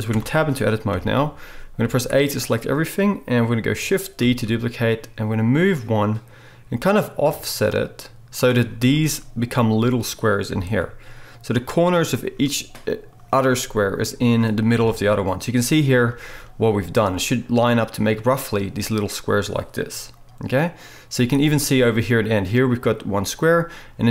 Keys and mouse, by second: 0.1 Tab, 0.9 KP_7, 1.8 a, 4.2-7.2 shift+drag, 4.2 shift+d, 7.2-8.4 shift+right drag, 8.4 middle click, 8.8 shift+right click, 8.9-10.4 shift+middle drag, 10.4-11.5 right drag, 10.4 g, 11.5-13.2 shift+middle drag, 13.2-16.0 right drag, 14.8 KP_7, 16.0 shift+middle click, 16.5 right click, 16.6 middle click, 17.3-24.1 right drag.